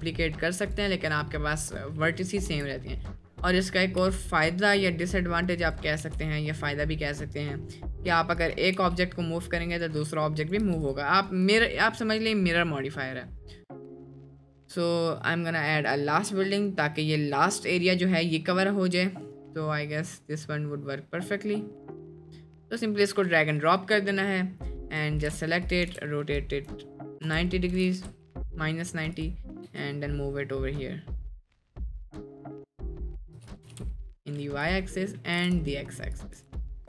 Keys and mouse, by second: 0.6 click, 2.0 middle click, 2.5 Tab, 2.9 middle click, 4.0 g, 6.0 g, 8.4 click, 8.8 g, 10.4 click, 10.7 Tab, 10.8 drag, 11.4 click, 15.9 click, 22.3 middle drag, 22.8 middle click, 24.5 middle click, 24.9 drag, 25.2 r, 25.9 r, 29.2 click, 29.7 g, 31.5 click, 31.7-32.2 middle drag, 32.7-33.0 drag, 33.0 middle click, 33.4 g, 34.8 middle drag, 35.3 g, 36.4 drag.